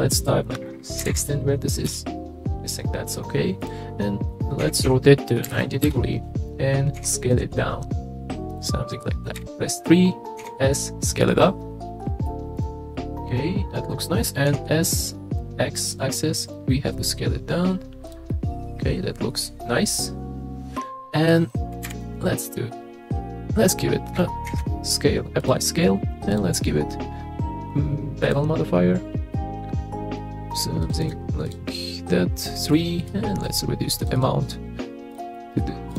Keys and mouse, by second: 3.6 click, 4.6 r, 4.8 y, 5.4 KP_9, 5.5 KP_0, 5.8 KP_Enter, 7.0 s, 9.3 KP_3, 10.4 s, 12.6 click, 12.9-13.8 middle drag, 14.5 s, 15.4 x, 18.3-21.3 middle drag, 21.8 KP_3, 24.5 ctrl+a, 26.3 click, 29.3-30.2 middle drag, 31.0 click, 32.7 click, 33.1 click, 34.0 click, 34.2 click, 34.4 click, 35.1 drag, 35.3 middle drag, 35.9 click.